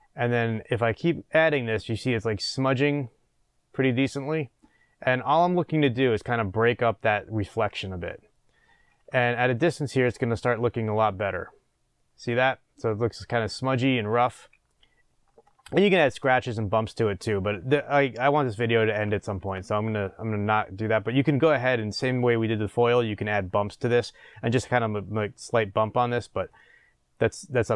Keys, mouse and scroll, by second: 0.3-9.7 drag, 9.9 scroll down 1, 11.0-27.7 middle drag, 14.9-15.7 scroll down 2.